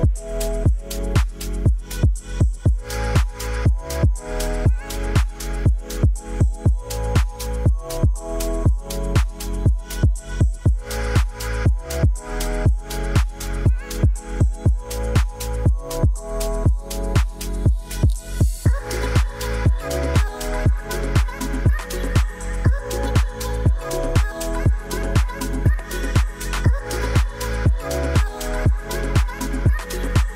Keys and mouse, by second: 1.8 middle click, 2.4 middle click, 2.6 shift+a, 5.6 alt+r, 5.9 alt+g, 7.6 r, 7.8 z, 8.5 9, 9.5 Return, 9.5 0, 10.6 g, 10.8 t, 11.4 x, 12.9 r, 14.0-15.9 typing, 15.2 Return, 17.2 g, 17.4 z, 18.6 right click, 19.0 g, 19.2 y, 19.7 x, 21.0-21.5 drag, 21.8 r, 22.4 y, 25.8-27.1 drag, 27.8-29.0 drag, 29.4 g, 29.7 z.